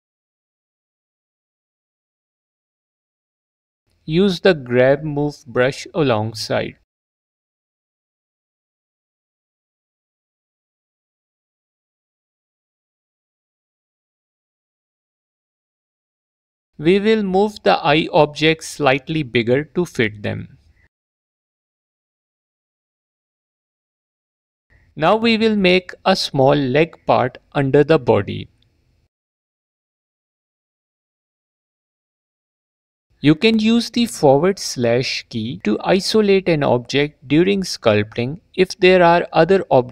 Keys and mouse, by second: 6.2 click, 6.8 g, 7.1 f, 7.4 click, 10.0 alt+click, 11.1 click, 11.6 click, 11.8 alt+click, 13.7 click, 14.0 click, 15.2 ctrl+z, 15.7 Tab, 16.7 click, 17.8 s, 19.4 click, 22.5 click, 24.5 drag, 25.8 click, 30.7-31.0 drag, 32.6 Tab, 33.3 alt+q, 33.6 alt+q, 34.3 /, 36.5 f, 36.8 shift+click, 39.0 alt+/, 39.1 alt+q, 39.7 /.